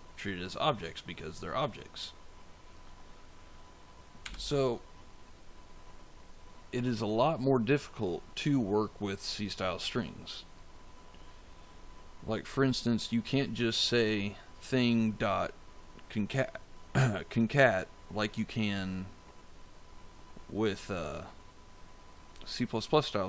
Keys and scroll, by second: 4.1 BackSpace.